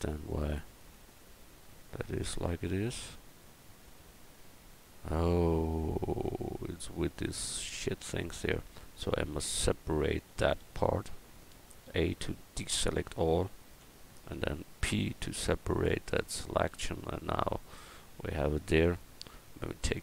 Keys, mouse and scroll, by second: 4.4 g, 7.9 middle click, 9.0 \, 9.5 Tab, 10.6 a, 11.8 a, 12.2 a, 13.4 l, 13.8 l, 14.9 p.